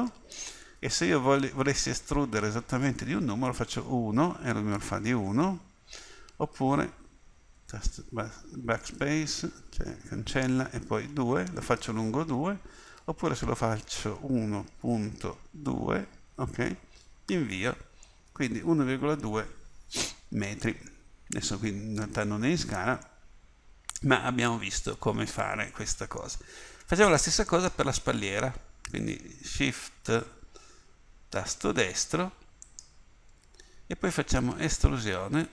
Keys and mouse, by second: 23.2 middle click, 24.3 middle click, 28.9-34.5 drag, 34.5 e.